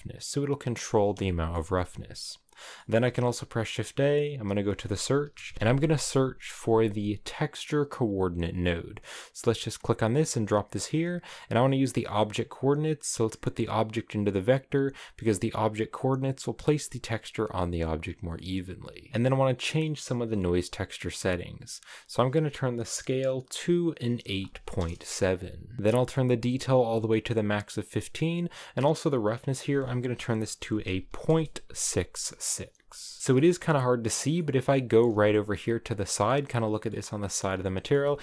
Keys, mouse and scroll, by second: 1.3-9.6 shift+middle drag, 13.2-14.2 drag, 17.8-24.7 drag, 26.8-32.1 drag, 32.1 6, 33.2 shift+middle click, 33.6-34.4 scroll up 5, 34.4-36.9 middle drag, 36.9-37.5 scroll up 1, 37.5-38.2 shift+middle drag.